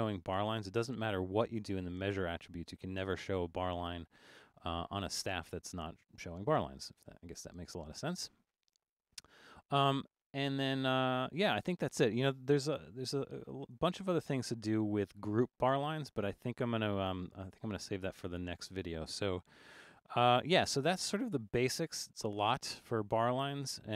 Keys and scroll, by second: 12.9 super+=, 13.6 super+=, 19.8 super+-, 20.4 super+-, 21.1 super+-.